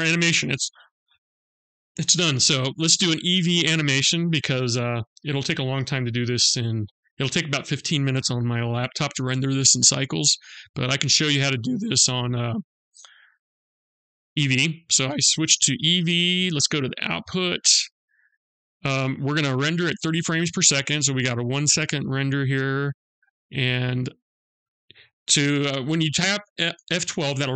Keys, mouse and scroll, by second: 4.7 click, 10.9 click, 11.6-12.0 scroll up 2, 12.5 click, 16.3 click, 17.6-18.2 scroll down 2, 18.2-20.4 scroll down 2, 22.3-22.9 scroll down 3.